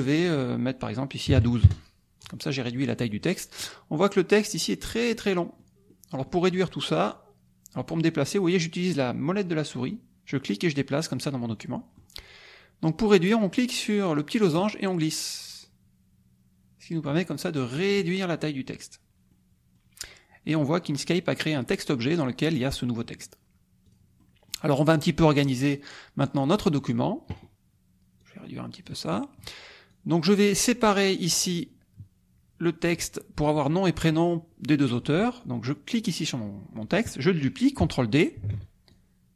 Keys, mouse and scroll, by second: 0.0 click, 1.3 KP_1, 1.4 KP_2, 1.6 KP_Enter, 3.2 click, 5.1 click, 5.9 click, 6.5 click, 7.8 click, 9.8-12.1 drag, 14.5-17.2 drag, 17.3 click, 19.3 click, 23.8 click, 24.2 click, 24.2-24.7 scroll down 1, 25.4-27.0 scroll down 1, 28.2 click, 29.1-29.6 scroll down 1, 29.9 click, 35.9 click, 38.4 ctrl+d, 38.9-39.3 ctrl+drag.